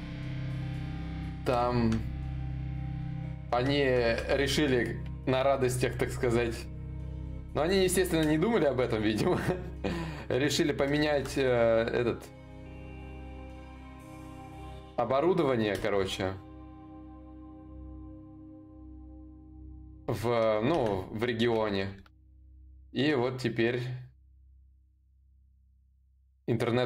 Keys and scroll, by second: 3.7 ctrl+z, 12.4 ctrl+z.